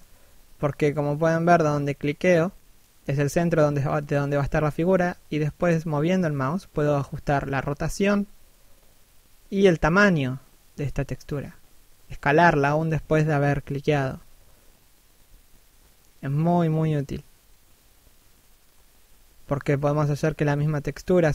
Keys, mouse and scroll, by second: 1.7 click, 4.7 scroll down 1, 4.9 middle click, 6.1-6.7 scroll up 1, 6.7 click, 8.5 middle click, 10.7 scroll up 1, 11.2 click, 13.8 scroll down 1, 13.9 middle click, 16.1 scroll up 1, 16.5 click, 18.8 middle click, 19.8 click.